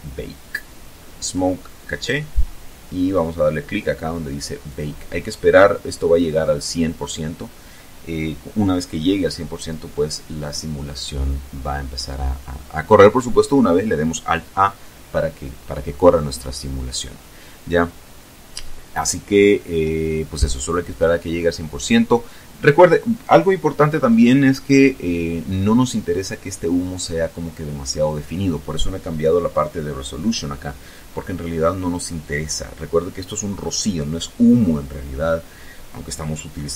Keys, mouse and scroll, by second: 0.2-1.2 scroll down 4, 3.1 click.